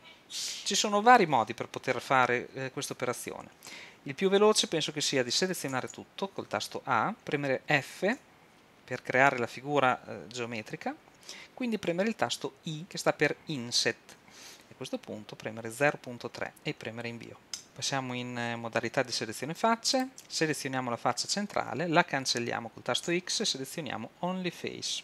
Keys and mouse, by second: 5.7 a, 5.9 a, 8.2 f, 12.8 i, 20.0 click, 20.2-21.3 middle drag, 21.3-23.1 drag, 23.1 x.